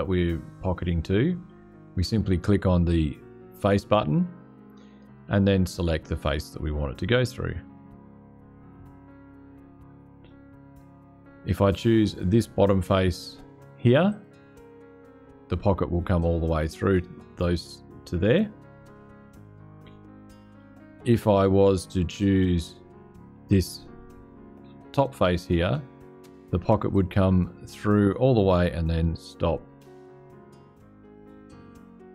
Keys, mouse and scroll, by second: 2.6 click, 7.5-8.6 drag, 10.0-11.8 drag, 13.8 click, 20.9 click, 22.0-23.4 drag, 26.6 click, 29.7-31.1 drag.